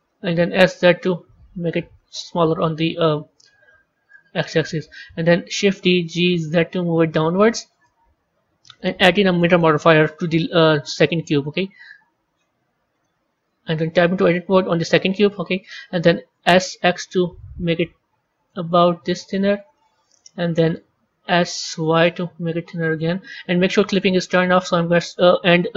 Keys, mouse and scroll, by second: 0.3 s, 2.3-3.2 middle drag, 3.2 scroll up 2, 4.0-5.6 middle drag, 5.6 shift+d, 8.6 click, 9.4-12.4 drag, 13.8 Tab, 16.2 s, 19.7-21.2 middle drag, 21.2 s, 23.2-25.7 middle drag.